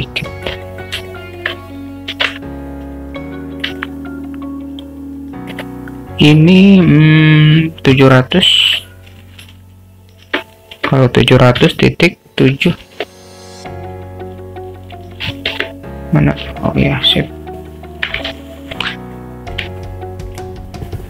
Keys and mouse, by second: 0.7 alt+middle click, 1.1 alt+shift+middle drag, 2.3 shift+t, 3.8-5.6 alt+middle drag, 6.5-16.4 drag, 18.6 alt+shift+middle click, 19.2 alt+middle click, 20.4 click.